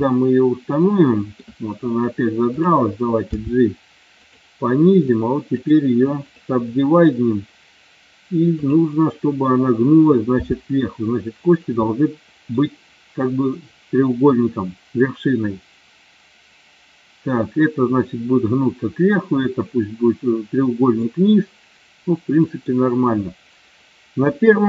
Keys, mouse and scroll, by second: 0.1-1.3 middle drag, 2.4 click, 3.2 g, 4.2 click, 4.8 click, 5.4 right click, 10.3 g, 11.5 click, 11.8 middle click, 21.1-22.5 middle drag, 24.2 KP_1.